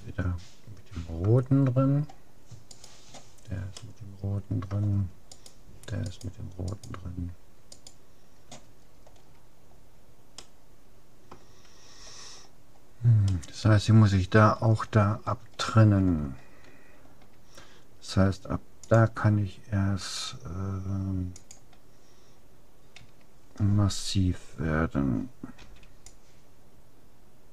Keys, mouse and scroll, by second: 1.7-2.7 middle drag, 2.7-4.5 right drag, 3.9 click, 4.5 middle click, 5.3 click, 5.3-9.5 right drag, 9.5-12.1 middle drag, 12.3 scroll up 1, 13.3-17.9 middle drag, 18.9-20.5 drag, 23.1 a, 25.7 c.